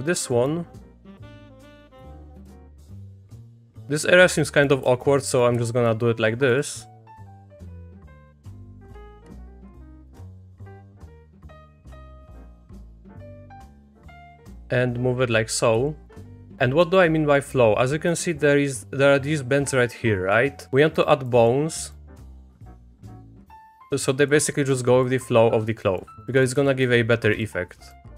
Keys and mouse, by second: 0.3 middle click, 1.0 click, 1.5 middle click, 1.6 middle click, 1.8 shift+click, 3.4 e, 3.6 click, 4.5 click, 4.9 shift+click, 5.2 click, 5.5 e, 7.1-8.6 drag, 8.6 e, 9.3 ctrl+z, 9.7 e, 10.5 click, 11.2 middle click, 12.1 click, 12.5 click, 13.6 e, 14.7 click, 16.0 shift+middle click, 16.7 middle click, 17.4 middle click, 18.0 middle click, 20.9 click, 21.3 middle click, 21.9 click, 22.4 middle click, 22.6 e, 23.1 middle click, 23.3 click, 23.6 click, 23.8 middle click, 24.1 click, 24.7 click, 25.9 middle click, 26.4 middle click, 26.6 e, 27.9 click.